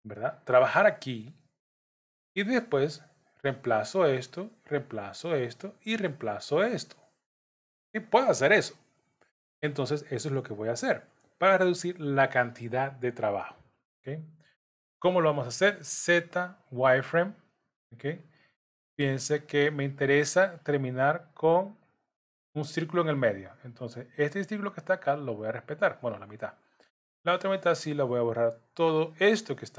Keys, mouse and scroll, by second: 2.7 click, 4.5 click, 20.4 click, 24.1 click, 25.9 click.